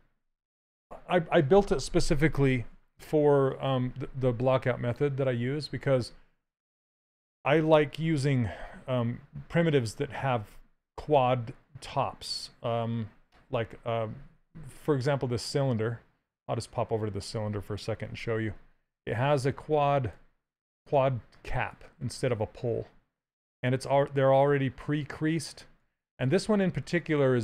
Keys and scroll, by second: 18.2 shift+f.